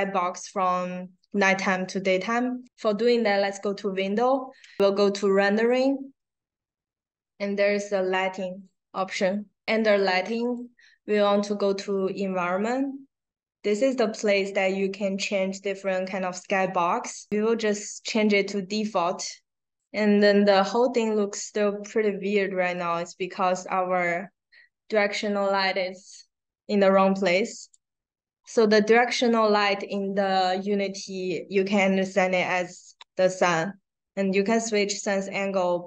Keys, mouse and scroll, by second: 2.6 click, 10.3 click, 18.0 click, 19.7 click, 22.7 click, 27.5 click.